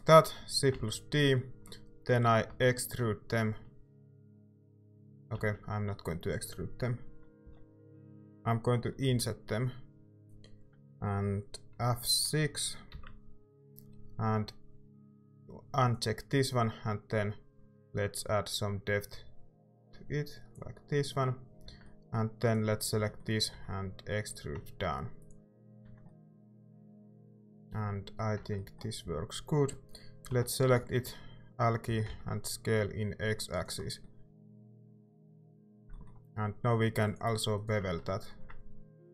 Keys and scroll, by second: 0.7 d, 2.5 e, 5.4 ctrl+z, 7.4 g, 9.0 i, 12.9 F6, 21.6 z, 22.9-24.0 typing, 25.8 Tab, 28.4 Tab, 29.0 a, 30.3 i, 31.6-32.5 typing, 35.4 a, 38.3 ctrl+b.